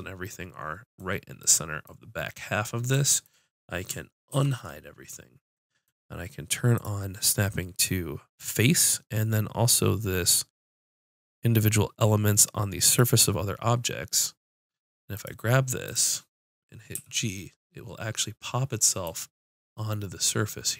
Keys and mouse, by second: 4.3 alt+h, 8.6 middle click, 10.5-12.8 middle drag, 12.8-15.4 right drag, 14.3 click, 15.6-16.9 drag, 16.9 g, 17.0 click, 19.4-20.7 drag.